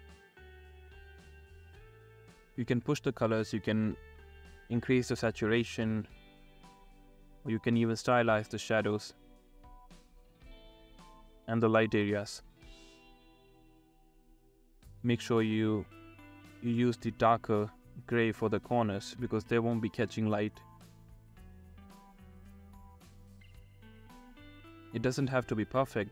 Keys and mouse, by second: 0.6 ctrl+z, 0.8 ctrl+z, 0.9-4.8 typing, 1.6 ctrl+z, 1.8 click, 2.3 ctrl+z, 2.6 ctrl+z, 3.0 ctrl+z, 3.6 shift+middle click, 4.4 ctrl+z, 6.1 ctrl+z, 6.2 ctrl+z, 6.2-9.4 typing, 6.7 ctrl+z, 7.2 ctrl+z, 7.5 ctrl+z, 8.0 ctrl+z, 8.4 ctrl+z, 9.0 ctrl+z, 9.2 ctrl+z, 9.6 ctrl+z, 10.0 ctrl+z, 10.3 middle click, 10.5 ctrl+z, 11.2-14.0 typing, 11.6 ctrl+z, 12.5 ctrl+z, 13.2 ctrl+z, 13.3 ctrl+z, 13.7 ctrl+z, 13.9 ctrl+z, 14.0 ctrl+z, 15.1-19.6 typing, 15.7 ctrl+z, 15.9 click, 16.2 ctrl+z, 16.4 ctrl+z, 17.4 ctrl+z, 17.9 ctrl+z, 18.9 ctrl+z, 18.9 ctrl+z, 19.2 ctrl+z, 19.6 ctrl+z, 20.3 ctrl+z, 20.5 ctrl+z, 20.8 ctrl+z, 20.8 ], 21.0 [, 21.1 ], 21.4 ctrl+z, 22.6 ctrl+z, 22.7 ctrl+z, 23.5 ctrl+z, 23.5 ctrl+z, 23.8 ctrl+z, 23.9 ctrl+z, 24.3 ctrl+z, 24.8 ctrl+z, 25.3-26.1 typing, 25.7 ctrl+z, 26.0 ctrl+z.